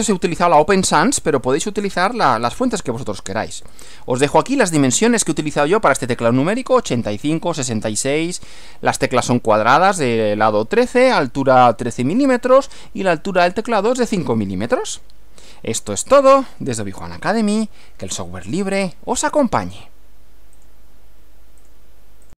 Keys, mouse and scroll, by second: 3.7 Right, 20.6 click, 21.7 click, 22.3 click.